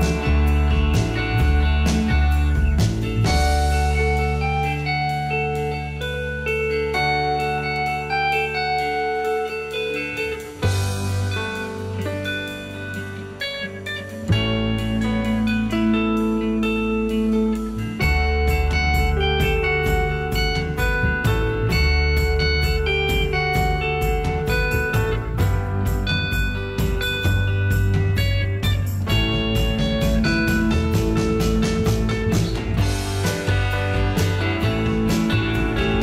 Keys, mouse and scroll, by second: 9.9 F2, 34.7 0.